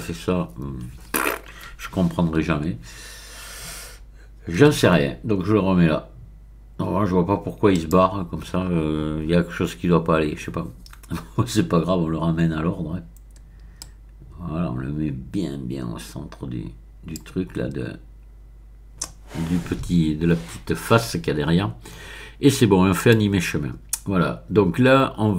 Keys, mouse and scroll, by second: 2.4 KP_1, 3.3 middle click, 4.6 g, 7.7 click, 13.8-17.5 drag, 18.4-19.9 middle drag, 23.0 click.